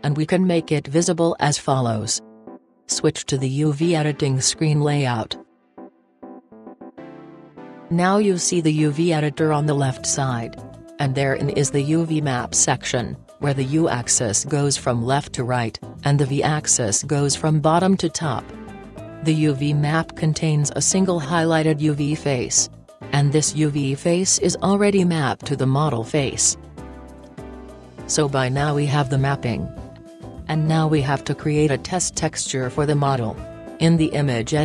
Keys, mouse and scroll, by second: 3.3-5.0 drag, 13.6-28.3 drag, 28.4-34.6 right drag.